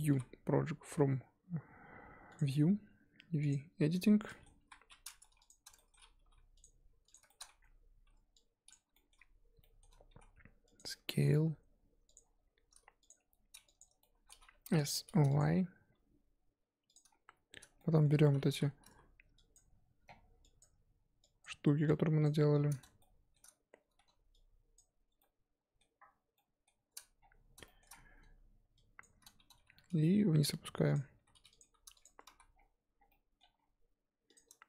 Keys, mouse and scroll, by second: 1.0 u, 3.4 click, 4.3 middle click, 4.6 KP_1, 5.2 Tab, 5.4 click, 5.7 shift+middle click, 6.2 g, 7.1 click, 7.3 shift+middle click, 7.4 scroll up 1, 8.7 click, 10.1 s, 10.9 middle click, 11.3 g, 12.2-12.5 scroll up 2, 12.5 s, 13.2 g, 14.5 s, 15.9 g, 17.3-17.8 scroll up 7, 17.8 shift+middle click, 18.1 scroll up 3, 18.5 3, 18.9 z, 19.5 click, 20.6 shift+click, 21.4 shift+click, 23.0 shift+click, 23.0 shift+middle click, 23.9 ctrl+z, 24.7 shift+click, 25.2-27.2 shift+middle drag, 27.2-27.6 scroll down 5, 27.6 shift+middle click, 27.9-28.8 scroll up 7, 29.0 shift+click, 30.1 g, 31.2 s, 31.6 g, 32.0 Tab, 32.3 z, 32.5-33.1 scroll down 7, 33.1 middle click, 33.5-34.3 scroll down 1, 34.3 click.